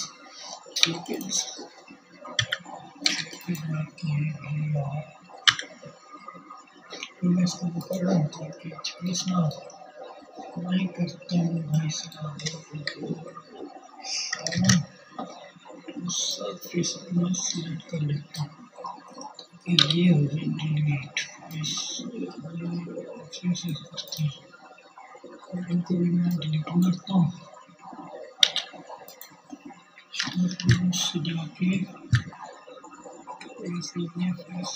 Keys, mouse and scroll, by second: 0.0 Tab, 0.7 3, 1.1 click, 1.9-4.2 middle drag, 3.1 Tab, 5.4 click, 7.0-12.0 middle drag, 12.1 ctrl+KP_7, 13.9-27.8 drag, 17.4 x, 26.1 x, 28.0-32.4 shift+drag, 32.6-34.7 shift+drag.